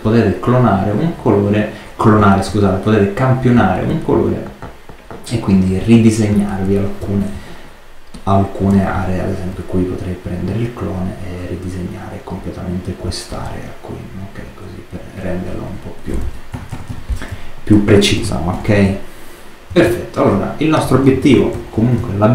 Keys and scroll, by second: 6.9 alt+space, 16.4 super+-, 17.1 super+space, 18.1 super+space, 18.4 super+-, 19.7 super+space, 20.8 super+space, 21.9 super+space.